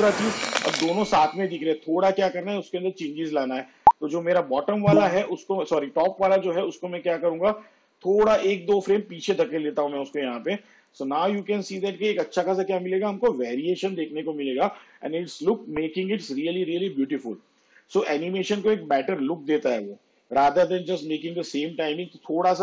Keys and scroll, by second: 12.2 space.